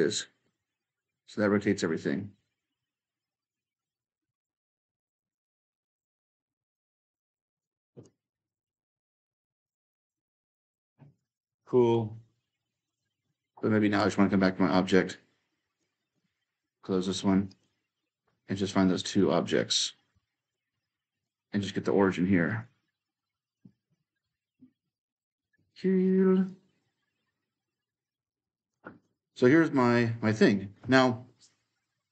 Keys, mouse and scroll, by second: 0.9 s, 2.1-3.3 right drag, 3.3-7.1 drag, 7.4-11.8 drag, 12.7-13.8 drag, 13.8-17.3 right drag, 13.9 w, 17.3-20.3 drag, 20.3-22.3 right drag, 20.5 e, 20.9 s, 22.3-23.2 drag, 23.4 ctrl+click, 25.3 w, 26.3-28.8 drag, 28.8-32.1 right drag, 28.9 w.